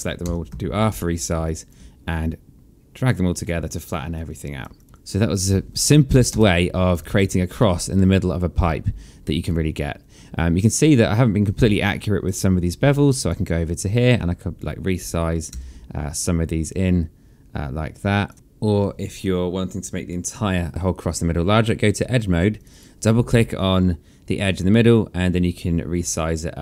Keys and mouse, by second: 0.2 r, 1.4 alt+click, 3.6 alt+click, 4.1 right click, 4.7 click, 5.4 alt+middle click, 5.8 alt+click, 6.2 space, 11.7 right click, 13.9 shift+click, 15.4 r, 16.6 click, 18.3 alt+middle click, 22.5 click.